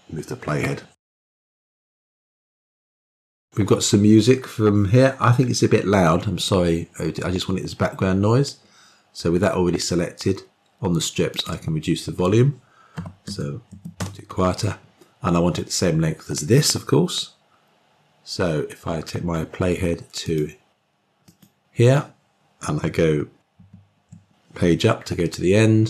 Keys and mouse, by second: 11.2-14.8 drag, 20.1 click, 21.1 click, 23.4 Page_Up.